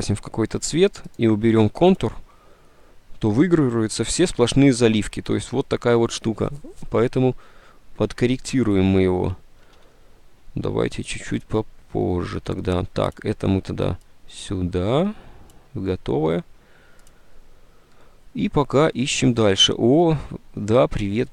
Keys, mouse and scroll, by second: 8.6 ctrl+z, 9.8 ctrl+z.